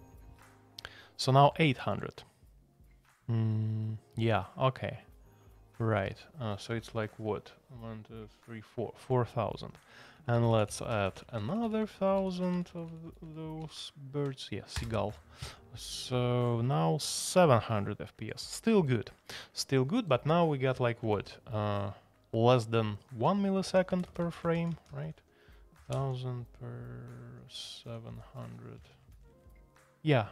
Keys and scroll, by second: 10.1 alt+p, 10.3 alt+p, 10.5 alt+p, 10.6 alt+p, 11.6-14.7 alt+p, 14.7 Return, 21.0 typing, 23.0-30.3 typing.